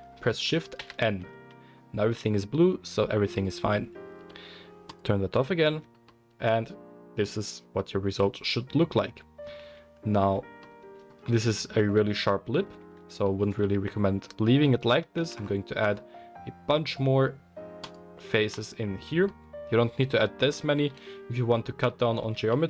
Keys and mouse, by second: 0.7 shift+n, 5.7 Tab, 9.6 Tab, 10.2 Tab, 12.8 Tab, 15.2 ctrl+r, 20.7 ctrl+z, 22.4 ctrl+r.